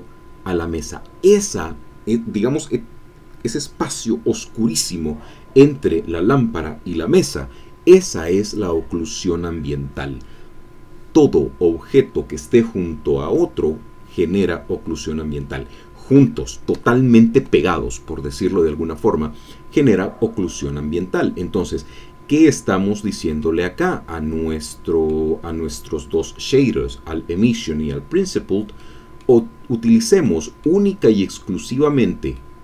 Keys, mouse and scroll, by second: 22.5-23.0 scroll down 2, 23.1 middle click, 23.1 scroll down 2, 23.9-25.3 middle drag, 28.7-30.0 middle drag, 30.2 middle click, 31.1-31.8 scroll up 2, 31.8-32.5 scroll down 4.